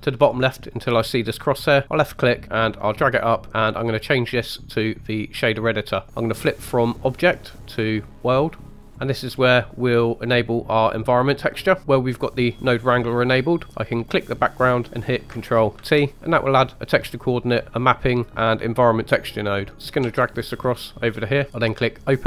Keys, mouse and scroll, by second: 1.4 click, 3.8-5.5 drag, 7.5-8.9 drag, 8.9 middle click, 8.9 scroll down 2, 9.7-10.4 middle drag, 14.0 click, 15.8 ctrl+t, 16.1 middle click, 19.7 click, 20.0 g, 21.4 click, 21.5 middle click, 22.0 click.